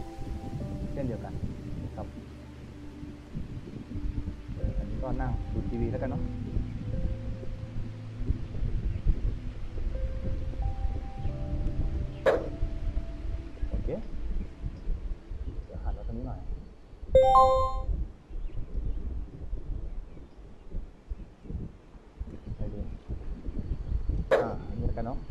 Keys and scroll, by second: 2.3 w, 5.6 a, 9.8 w, 13.1-14.0 typing, 16.3 d, 17.7 a, 20.0 a.